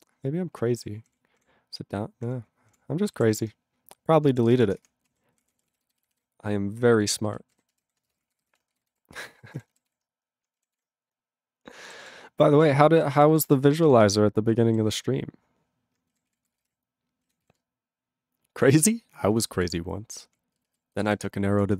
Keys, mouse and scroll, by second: 1.0 ctrl+l, 1.3 ctrl+l, 2.2 ctrl+l, 2.7 ctrl+l, 3.4 ctrl+s, 4.4 space, 4.5 {, 4.8 Return, 5.1 ctrl+a, 5.4 ctrl+o, 5.5 ctrl+e, 5.6 ctrl+p, 5.7 ctrl+e, 5.8 ctrl+b, 6.0 ctrl+b, 6.1 ctrl+b, 7.0-9.0 typing, 9.3 ctrl+e, 9.5 Tab, 10.0 ctrl+s, 10.7 ctrl+s, 12.0 ctrl+s, 12.5 ctrl+n, 12.6 ctrl+space, 13.0 ctrl+alt+b, 13.1 ctrl+g, 13.3 ctrl+n, 13.4 ctrl+e, 13.8 ctrl+s, 14.9 ctrl+s, 16.2 ctrl+s, 16.4 ctrl+p, 16.4 ctrl+space, 16.5 ctrl+e, 16.6 ctrl+n, 16.6 ctrl+g, 17.4 ctrl+s, 19.5 ctrl+s, 20.2 ctrl+p, 20.8 ctrl+alt+b, 21.0 ctrl+e, 21.1 ctrl+g, 21.7 ctrl+s.